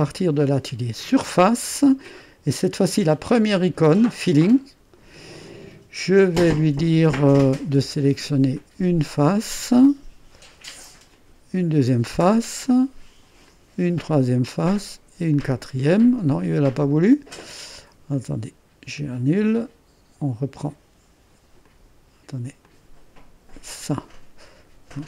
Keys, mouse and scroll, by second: 4.3-6.4 drag, 7.2-9.9 drag, 11.1-14.6 drag, 15.3 ctrl+click, 16.3-17.4 drag, 18.1-20.6 drag, 21.6 click, 22.6 click, 23.7 click.